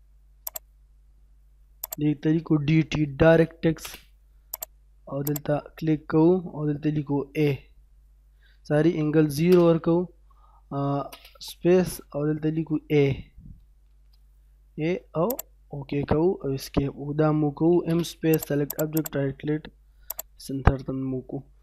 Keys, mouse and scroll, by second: 0.5 click, 3.3-3.8 typing, 4.2-4.6 scroll up 1, 4.6 click, 7.3 a, 9.5 space, 13.3 shift+space, 13.8 shift+a, 15.3 click, 17.8 space, 18.4 click, 18.7 right click, 18.9 click, 20.6 scroll down 1, 20.8 middle click.